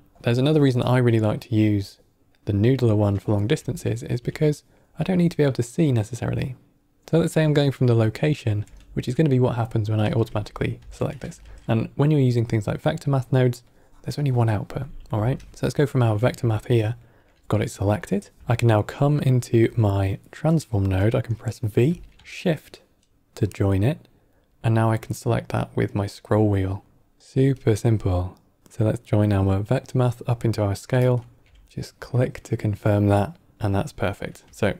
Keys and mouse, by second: 2.5 click, 3.1 middle click, 3.7 ctrl+middle click, 4.3 middle click, 8.6 v, 11.1 middle click, 11.3 q, 13.6-15.3 drag, 15.5 click, 16.5 ctrl+middle click, 17.0 ctrl+middle click, 17.7 middle click, 18.1 click, 18.4 ctrl+middle click, 19.6 middle click, 21.8 v, 34.6-34.7 ctrl+right drag.